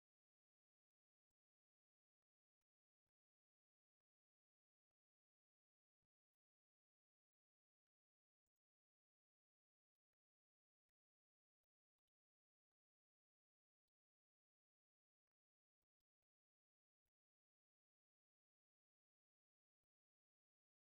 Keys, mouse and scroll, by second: 0.6 middle click, 1.0 middle click, 1.5 middle click, 2.0 click, 3.4 alt+middle click, 5.9 middle click, 6.1 click, 10.8-11.8 alt+middle drag, 12.4 middle click, 18.4 F2, 18.8 F3, 20.4 click.